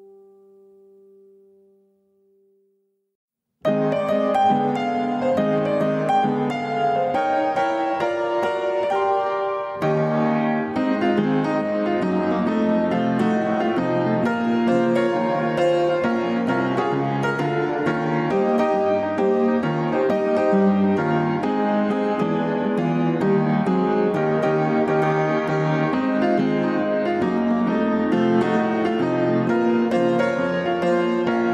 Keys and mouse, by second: 8.0-9.2 middle drag, 10.3 alt+z, 10.8-12.7 middle drag, 16.8-19.7 middle drag, 20.9-21.9 middle drag, 24.5-25.1 middle drag, 25.5-26.2 shift+middle drag, 26.7-27.7 middle drag, 30.7 ctrl+r.